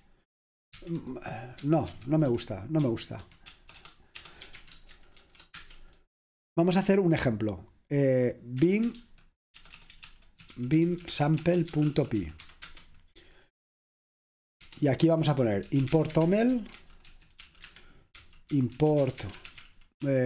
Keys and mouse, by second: 0.8 ctrl+c, 1.4-5.9 typing, 8.4-20.1 typing.